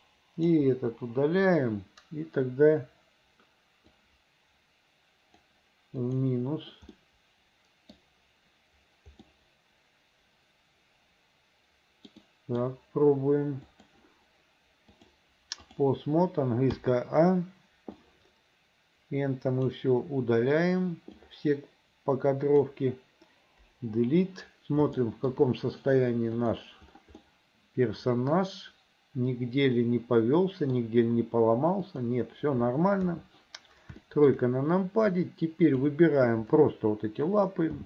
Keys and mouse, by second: 0.1 click, 0.8 Delete, 4.1-5.5 drag, 6.2 click, 7.1-8.1 middle drag, 9.0 click, 9.4-12.2 middle drag, 12.4 middle click, 15.1 click, 16.9 a, 18.1-19.9 drag, 21.3-22.7 drag, 23.8 Delete, 25.1 shift+middle click, 26.5 click, 27.3-30.9 middle drag, 32.0 middle click, 33.1 KP_3, 34.1 shift+middle click, 35.4 click.